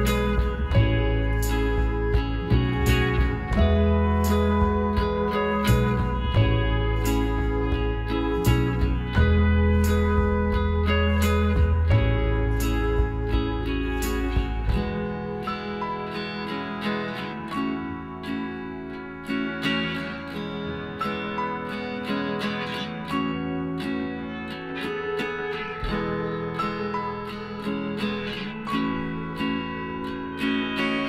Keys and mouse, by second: 0.4 s, 5.9 click, 6.3-7.5 middle drag, 7.5-9.2 right drag, 8.3 s, 10.7 middle click, 11.5-13.4 right drag, 12.3 s, 14.1-15.4 middle drag, 16.3-17.9 drag, 18.1-20.0 right drag, 19.1 s, 21.8 right click, 22.2 click, 22.6 click, 22.6 right click, 23.8-25.3 middle drag, 23.8 right click, 25.6 s, 29.3-30.6 right drag, 30.2 middle click.